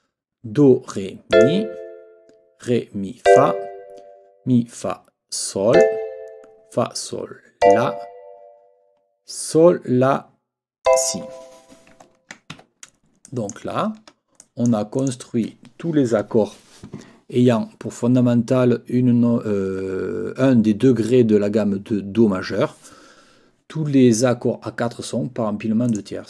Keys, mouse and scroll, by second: 1.3 click, 3.2 click, 5.7 click, 7.6 click, 10.8 click, 12.0 ctrl+middle click, 12.0-12.3 ctrl+scroll down 1, 12.5 ctrl+Escape, 13.2 click, 13.5 scroll up 1, 13.8 ctrl+scroll down 1, 14.4 ctrl+click, 14.5-15.1 ctrl+scroll up 2, 14.6 click, 15.1 click, 25.9 click.